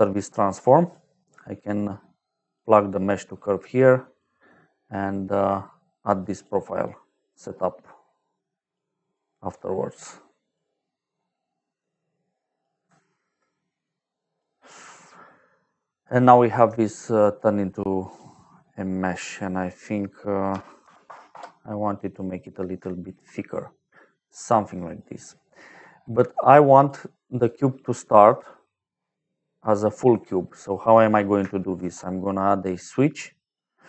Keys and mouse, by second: 0.2 click, 1.2 click, 2.9 middle click, 3.7 click, 5.2 click, 6.0 click, 6.8 click, 8.9 click, 9.7 click, 10.8 middle click, 11.7 click, 13.0 ctrl+right click, 13.8 click, 16.7 shift+middle click, 18.0 click, 19.0 click, 20.7 KP_1, 21.0 KP_0, 21.2 Return, 22.8 shift+middle click, 23.7 middle click, 26.4 click, 27.4 click, 29.2 middle click, 30.3 middle click, 31.7 shift+a, 33.4 click.